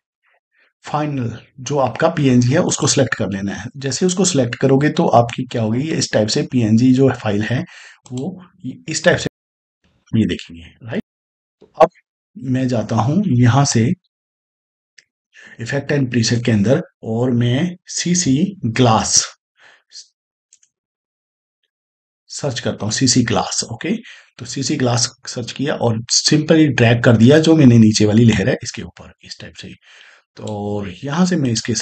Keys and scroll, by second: 9.1 space, 17.8 c, 18.0 c, 18.6 g, 20.4 BackSpace, 20.9 space, 21.3 c.